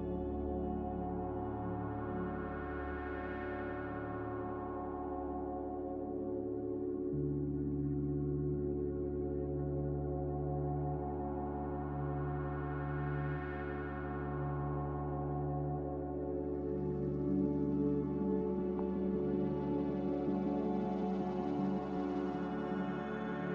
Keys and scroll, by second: 5.8 F9, 7.0 a.